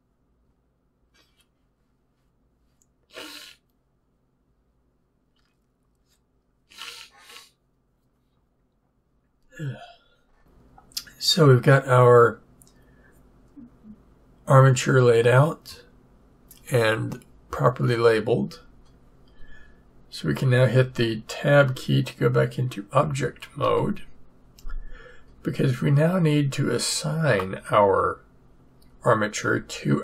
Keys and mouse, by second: 23.6 Tab, 27.4-30.0 drag.